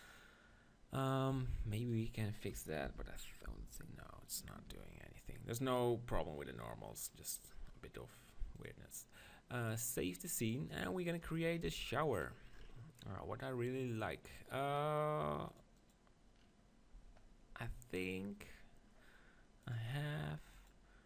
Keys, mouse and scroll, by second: 1.0-3.5 right drag, 1.4 Tab, 2.9 ctrl+l, 3.5 ctrl+n, 8.9-10.4 drag, 10.4-15.1 middle drag, 11.2 KP_7, 11.6 z, 15.5-17.6 drag.